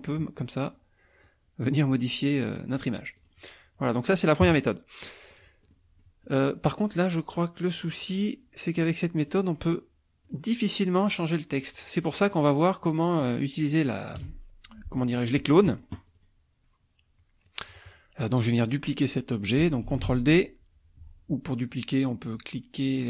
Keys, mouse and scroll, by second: 1.2-3.0 drag, 3.2 click, 4.4 KP_Subtract, 5.0 middle click, 5.7 middle click, 6.0 middle click, 8.0 click, 8.9 click, 9.3 click, 10.2 click, 10.9 click, 11.9-13.2 drag, 14.2 KP_Subtract, 14.9 click, 15.7 click, 17.5 click, 19.8 ctrl+d.